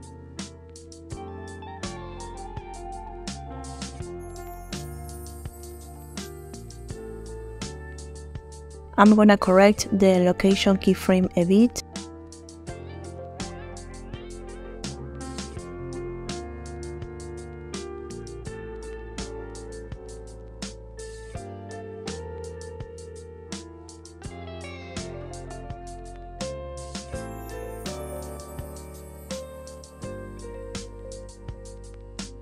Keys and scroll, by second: 5.2 space.